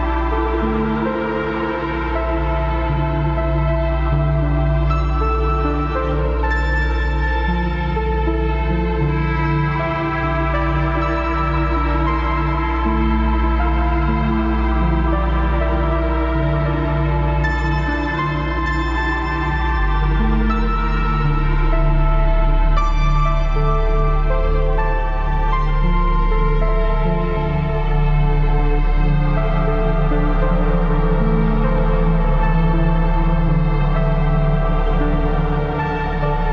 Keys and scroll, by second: 0.7 b, 2.9 ctrl+z, 3.8 ctrl+z, 4.0 ctrl+z, 4.4 ctrl+z, 4.7 ctrl+z, 5.2 ctrl+z, 5.4 ctrl+z, 7.5 ctrl+z, 9.3 typing, 11.3 typing, 13.0 ctrl+d, 13.2 ctrl+KP_Subtract, 13.5 ctrl+KP_Add, 14.8 ctrl+KP_Subtract, 16.0 ctrl+KP_Add, 16.2 space, 17.2 ctrl+j, 18.3 Down, 19.2 ctrl+KP_Subtract, 19.3 Down, 20.5 Up, 20.7 Up, 20.8 Down, 20.8 Up, 21.6 Return, 22.6 b, 23.3 ctrl+KP_Subtract, 26.2 ctrl+KP_Add, 26.4 ctrl+KP_Subtract, 27.5 Return, 33.0 ctrl+KP_Add, 34.1 ctrl+z, 35.2 ctrl+z.